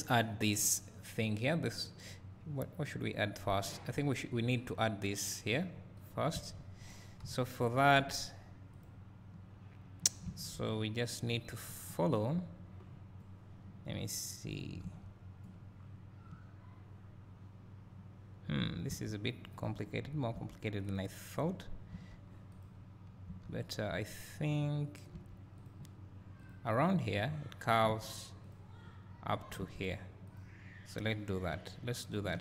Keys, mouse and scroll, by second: 6.1 click, 6.4 Tab, 7.2 KP_1, 8.8 click, 11.4 z, 11.4 click, 11.9-14.0 scroll down 2, 14.0 click, 14.2 click, 14.4 click, 15.6-15.9 scroll down 2, 15.9-16.9 drag, 16.6 scroll up 1, 16.9-18.0 scroll, 19.5 z, 19.6 click, 19.9 scroll, 20.0 scroll up 1, 20.9 click, 22.6 click, 24.0 click, 25.6 click, 28.4 z, 28.5 click, 30.4 click.